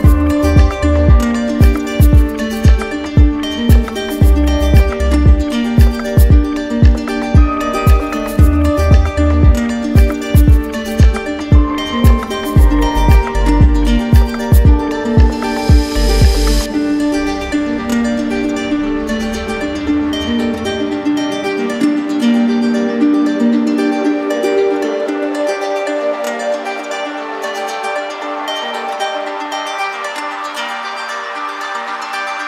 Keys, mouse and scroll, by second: 1.4 alt+click, 1.7 ctrl+z, 3.4-4.5 drag, 5.7-6.8 drag, 8.9-9.9 drag, 11.8-12.9 drag, 13.9 click, 17.7 alt+click, 18.8 click, 19.2 right click, 19.3 ctrl+z, 22.6 alt+click, 23.6 click, 23.9 ctrl+z, 28.1 alt+click, 28.7 ctrl+z, 30.4 ctrl+alt+z, 30.4 alt+click.